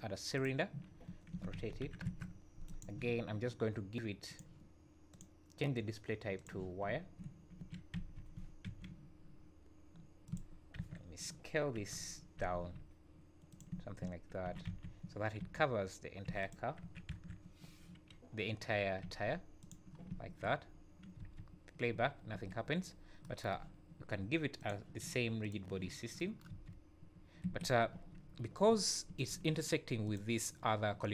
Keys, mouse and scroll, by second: 0.9 scroll down 2, 1.3 r, 4.3 click, 5.1 click, 6.9 `, 7.6 s, 10.8 KP_3, 11.8 KP_1, 12.5 s, 13.7 `, 14.5 s, 16.8 KP_1, 17.1 KP_Decimal, 19.0 s, 20.0-21.1 scroll down 7, 20.1 `, 21.2 space, 22.3 Escape, 22.9 scroll up 3, 24.6 click, 25.4 click, 25.9-26.2 scroll down 4, 26.5 space, 27.4 Escape, 27.9 `, 28.2 scroll up 4, 29.1 `, 30.0 click.